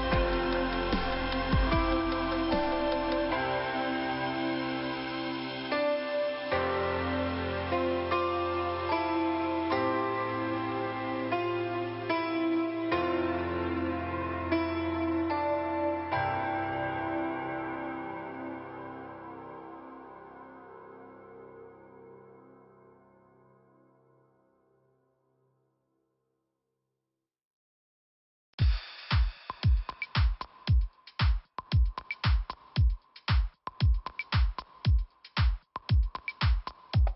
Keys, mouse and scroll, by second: 1.0 click, 1.1 click, 1.7-2.1 scroll down 2, 2.1 click, 8.2 click, 10.1 ;, 11.4 click, 11.5 click, 12.3 click, 17.0 click, 17.1 click, 17.7 scroll up 2, 19.4 click, 21.3 click, 23.1 middle click, 24.9 click, 26.3 click, 28.5 middle click, 28.5 ;, 29.1 middle click, 30.2-31.1 scroll up 2, 31.8 click, 33.3 click, 34.1 scroll up 1, 35.1 click, 35.3 click.